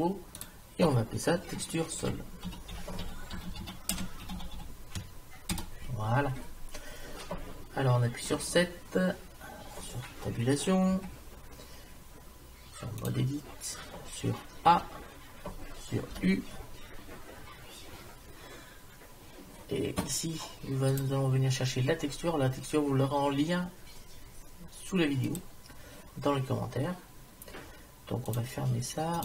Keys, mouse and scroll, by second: 8.3 KP_7, 11.1 Tab, 14.7 a, 16.2 u, 20.9-22.9 drag, 28.3 click.